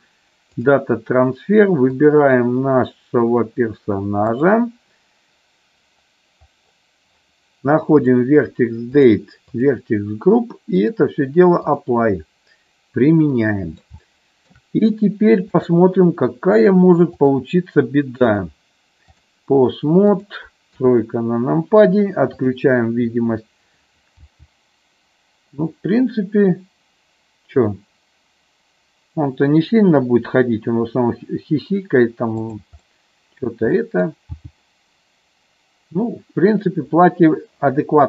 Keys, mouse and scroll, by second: 8.0 click, 9.6 click, 10.9-12.0 drag, 13.3 middle click, 14.1 shift+middle click, 15.5 click, 17.1 click, 18.3 click, 20.0-21.1 drag, 21.1 KP_3, 24.1 g, 32.8 middle click, 33.6 middle click, 34.3 g.